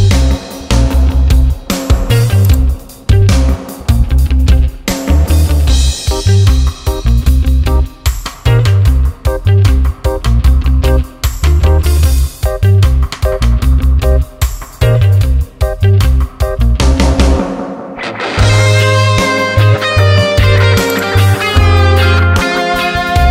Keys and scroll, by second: 5.8 n, 6.5 a, 7.8 BackSpace, 9.0-14.3 typing.